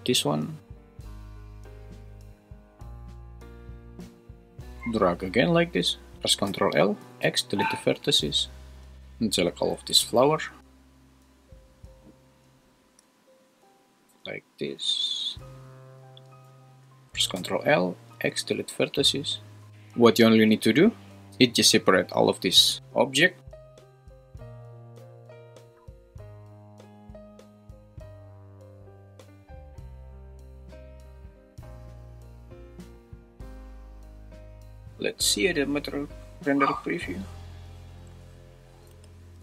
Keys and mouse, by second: 0.6 click, 1.4 1, 1.9 click, 2.0 x, 2.4 `, 4.9-6.2 drag, 6.2 super+z, 6.5 ctrl+l, 7.2 x, 9.5 click, 17.4 ctrl+l, 18.1 x, 26.7 click, 27.0 ctrl+l, 27.1 x, 28.2 ctrl+l, 28.8 ctrl+l, 29.5 ctrl+shift+l, 30.1 ctrl+l, 30.1 x, 31.5 ctrl+l, 31.6 x, 32.8 click, 33.1 ctrl+l, 33.1 x, 34.6 Tab, 35.5-36.8 drag, 38.9 g.